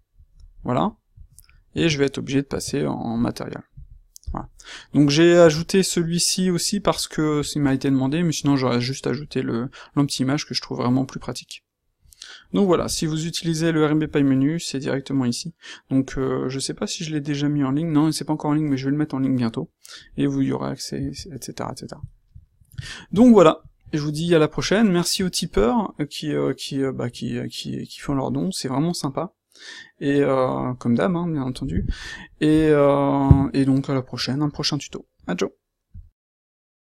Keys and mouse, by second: 1.6 z, 2.4 z, 3.6 s, 12.7 x.